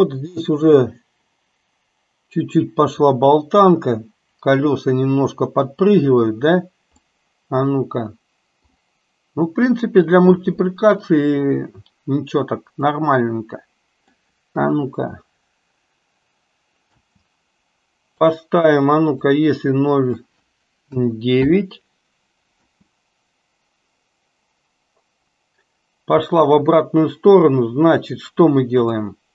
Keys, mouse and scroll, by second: 7.1-8.9 middle drag, 13.1-14.3 middle drag, 14.6 KP_3, 17.1 space, 18.2-21.6 drag, 22.6 space, 26.3 space, 28.9 click.